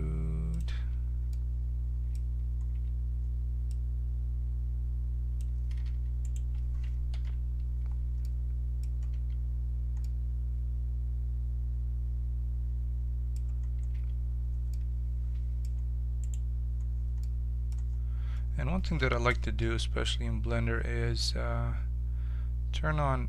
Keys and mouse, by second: 0.7 z, 1.3 middle click, 2.7 Tab, 3.6-5.0 drag, 6.2 right click, 7.1 ctrl+KP_Subtract, 9.1 z, 13.9 z, 14.7-16.2 middle drag, 16.2 click, 16.6-18.3 right drag, 18.3-19.6 middle drag, 19.6 n.